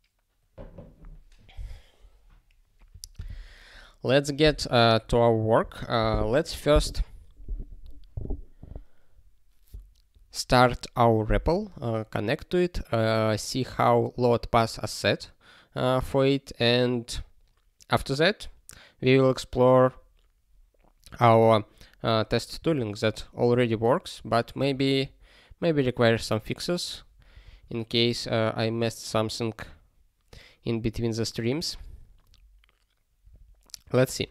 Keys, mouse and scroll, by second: 24.5 ctrl+e.